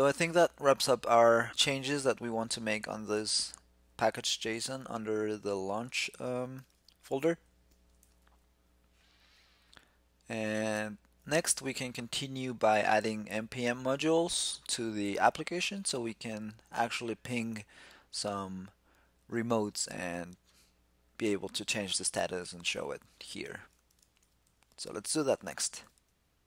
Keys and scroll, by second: 6.4 ctrl+<, 7.7 shift+super+e.